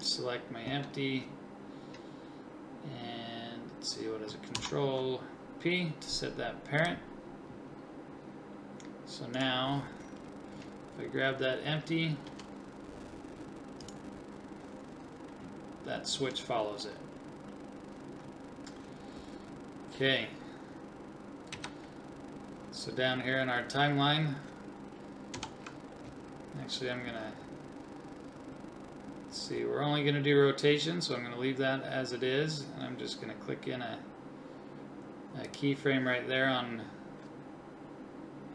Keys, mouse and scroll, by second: 4.5 ctrl+p, 12.3 g, 21.5 Right, 25.3 Left, 35.5-38.5 drag.